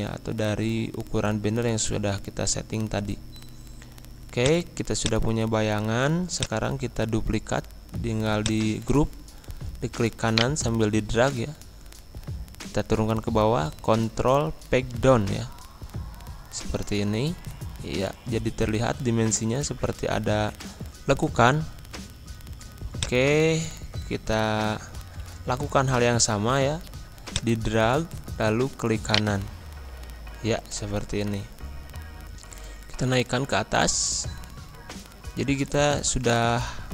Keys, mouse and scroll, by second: 2.4 scroll up 1, 2.9 scroll down 1, 4.4 click, 5.6-6.2 scroll down 1, 6.3 click, 7.4 scroll up 1, 8.3-10.3 drag, 10.3 shift+right click, 12.4 ctrl+Page_Down, 14.4 Left, 21.2 ctrl+d, 22.0 ctrl+z, 23.0 click, 24.0 ctrl+z, 27.3-29.1 drag, 29.1 shift+right click, 30.5 ctrl+End, 31.3 click, 32.4 ctrl+Page_Down, 35.5 ctrl+Page_Up.